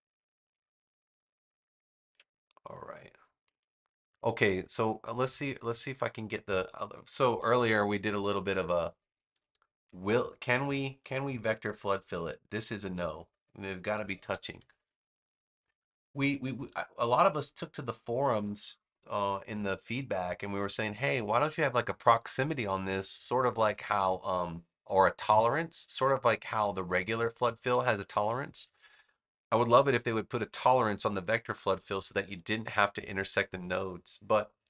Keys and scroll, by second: 7.3 super+=, 9.2 space, 14.2 super+=, 18.3 space, 21.1 space, 28.2 super+-, 29.5 space.